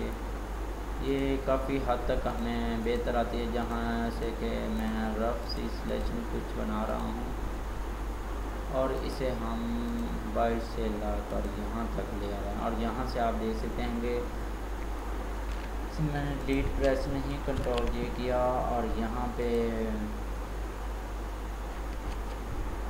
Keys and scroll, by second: 17.5 ctrl+j, 22.2 ctrl+z.